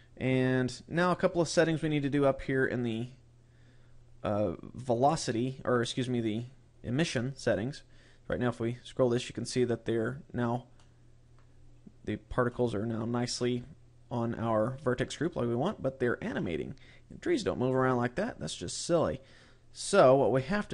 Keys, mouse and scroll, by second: 0.7 scroll up 1, 1.5-2.9 scroll up 15, 5.5-6.5 scroll up 3, 6.5-7.2 scroll up 3, 8.2 click, 10.6 middle click, 11.4 scroll up 3, 12.3 middle click, 14.3 click, 17.3 click, 20.0 click.